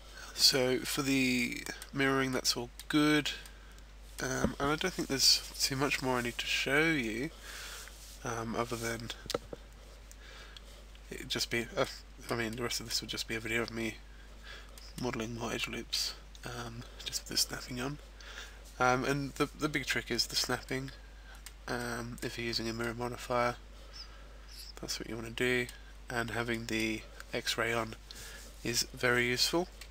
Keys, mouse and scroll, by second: 0.9 scroll down 1, 1.0 middle click, 2.5 middle click, 3.3 middle click, 11.8 middle click, 12.5 middle click, 14.7 middle click, 15.6 middle click, 20.7 middle click, 21.8 middle click, 22.8 middle click, 26.5 middle click.